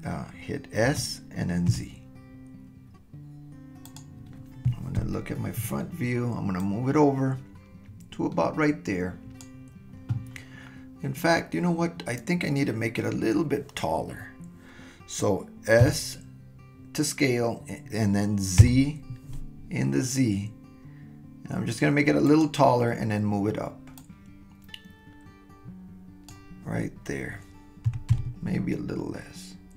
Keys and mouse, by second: 0.8 s, 5.0 KP_1, 6.6-9.4 drag, 15.8 s, 24.1-26.3 drag, 27.9 s.